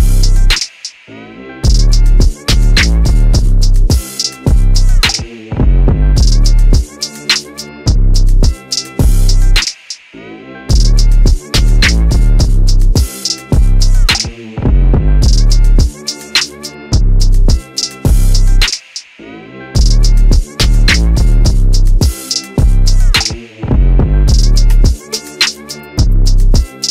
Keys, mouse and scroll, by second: 3.4 middle click, 5.6 right click, 6.7 click, 9.5 middle click, 10.6 right click, 12.5 Tab, 13.1 right click, 14.3 click, 14.9 right click, 16.5 p, 20.4 click, 21.9 right click, 22.6 middle click, 25.4 click.